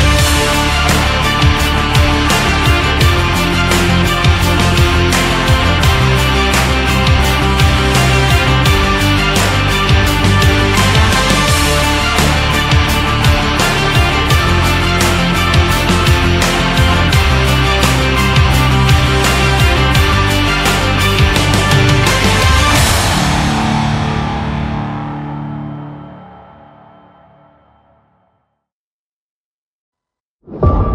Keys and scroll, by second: 14.6 4, 14.8 5, 15.5 Return, 23.9 ctrl+z.